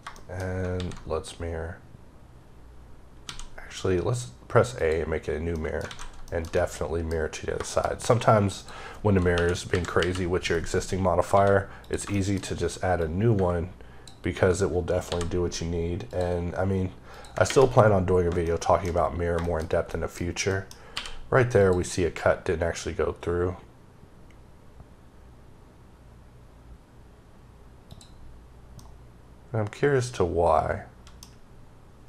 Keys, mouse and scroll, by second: 0.0 shift+middle click, 0.6 alt+x, 4.7 click, 5.4 middle click, 6.1 middle click, 7.3 scroll down 1, 7.5 middle click, 7.8-8.5 scroll, 8.5 click, 9.2 KP_1, 9.9 KP_Decimal, 10.5-11.2 scroll up 5, 11.2 d, 11.7 click, 12.0 shift+middle click, 12.9 click, 15.0 ctrl+c, 16.0 ctrl+click, 17.0 ctrl+click, 18.3 shift+middle click, 19.0-19.8 scroll down 4, 19.3 shift+middle click, 19.8 middle click, 20.1 scroll down 2, 20.4 middle click, 21.5 click, 22.4-23.8 scroll down 1, 24.0-24.8 scroll down 1, 24.8-25.5 scroll up 1, 26.1-27.2 scroll down 2, 27.2-27.8 scroll up 1, 27.8 click, 28.7 middle click.